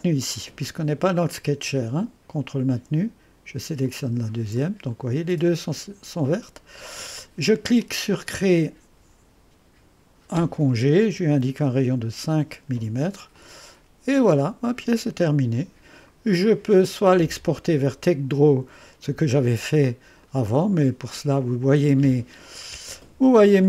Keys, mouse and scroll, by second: 1.4-6.8 drag, 7.8 click, 11.1 5, 11.8 Return, 13.4-16.1 drag, 14.5 typing, 17.2-18.7 right drag, 20.2 click.